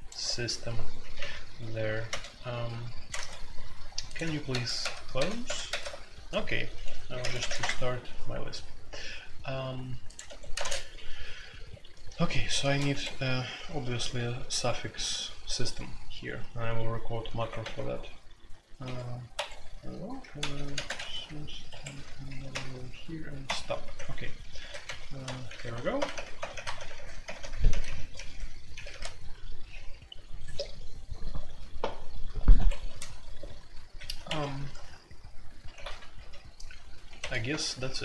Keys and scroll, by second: 1.1-2.1 typing, 3.1 ctrl+g, 4.5 super+c, 4.8 super+c, 5.1 super+c, 5.4 super+c, 6.9-7.6 typing, 10.2 Escape, 10.5-38.0 typing, 10.6 Tab, 12.9 Escape, 19.3 Escape, 21.6 Escape, 32.5 Escape, 34.2 Escape, 34.4 F2, 35.7 alt+2, 37.5 Return.